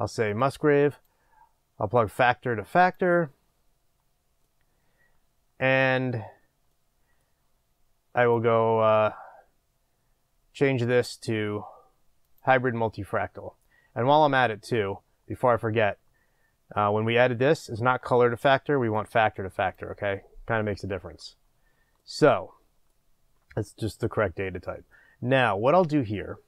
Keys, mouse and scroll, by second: 0.4-1.4 drag, 3.5-4.5 scroll down 1, 4.5-12.4 middle drag, 12.4-19.7 drag, 22.0-26.4 middle drag.